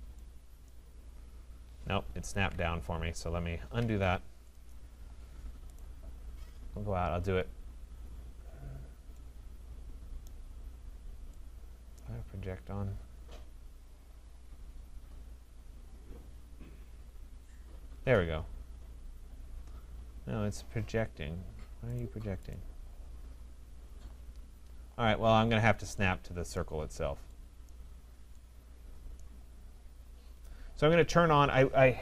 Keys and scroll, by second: 2.3 ctrl+z, 3.8 Escape.